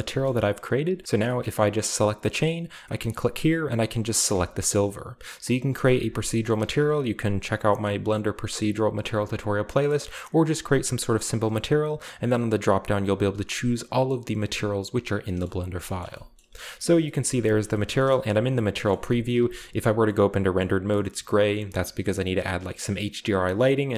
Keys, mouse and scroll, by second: 0.2-0.9 middle drag, 0.9 shift+right click, 1.3-3.3 shift+scroll up 2, 1.8-2.9 shift+middle drag, 2.9-3.8 drag, 4.3-5.5 drag, 5.2 middle click, 5.7-7.0 drag, 5.9 g, 7.1 click, 7.6 middle click, 7.9-8.5 scroll up 2, 9.7 click, 11.4 click, 12.0 click, 15.1-16.0 scroll down 2, 15.4 middle click, 15.6 click, 16.1 shift+middle drag, 16.9-18.1 scroll up 2, 17.6 shift+middle drag, 17.9 shift+middle click, 18.1 middle click, 18.1 a, 18.9 middle click, 18.9 z, 19.0-19.9 scroll up 1, 20.6 middle drag, 21.1 middle click.